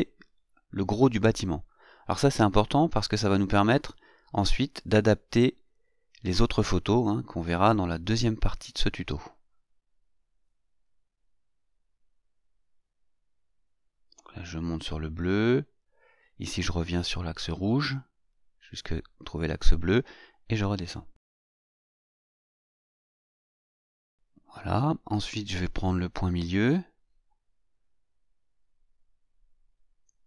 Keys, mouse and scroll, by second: 0.8 click, 2.4-2.8 scroll up 2, 3.7 click, 5.9-6.2 scroll up 1, 6.2 scroll down 1, 6.3-8.2 scroll up 3, 9.8 click, 11.3 click, 14.2 click, 18.1 click, 21.3 click, 23.8-24.6 scroll down 1, 27.6 click.